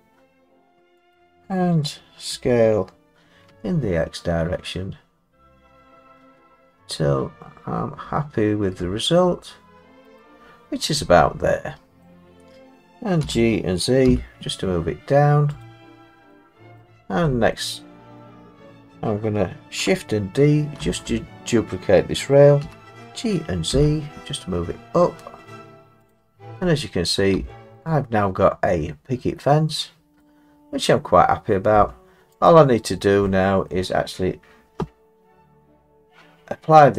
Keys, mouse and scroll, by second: 1.2 click, 2.3 s, 3.5 x, 10.2 click, 12.0 middle click, 13.0 middle click, 13.1 scroll, 13.2 g, 14.1 z, 15.6 click, 16.3-17.4 scroll, 17.5 middle click, 17.6 middle click, 20.8 shift+d, 22.6 g, 23.7 z, 26.1 click, 27.1 middle click, 27.4 Tab, 30.2 middle click, 30.6 middle click, 30.6 middle click, 30.7 middle click, 31.7 Tab, 32.5 click, 32.9 middle click, 32.9 middle click, 33.2 middle click, 33.7 middle click.